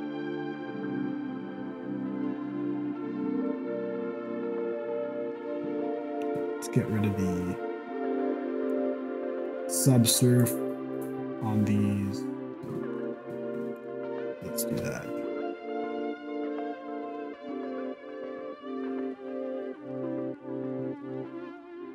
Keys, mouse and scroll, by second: 0.0 click, 1.6 click, 7.9 click, 8.8 click, 9.5 click, 10.5 click, 11.1 right click, 13.8 click, 14.6 n.